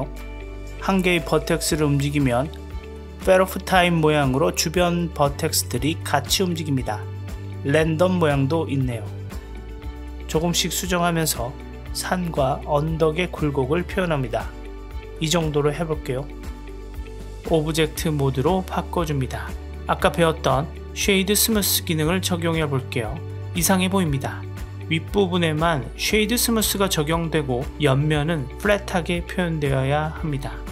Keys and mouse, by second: 3.1-5.3 middle drag, 5.6-5.9 drag, 6.5-9.3 drag, 9.5 middle click, 10.0 g, 11.7 g, 13.4 g, 14.5-16.6 middle drag, 17.1 Tab, 17.8-19.4 middle drag, 20.9 right click, 24.4-30.6 middle drag.